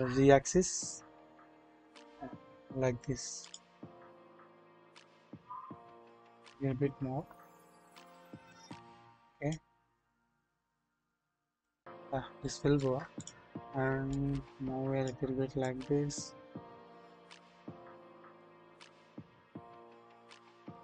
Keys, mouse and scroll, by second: 0.1 typing, 5.7 typing, 9.3 click, 10.1-11.6 drag, 12.4-12.8 shift+middle drag, 14.1-15.1 drag, 15.6-17.5 middle drag, 18.5-20.2 middle drag.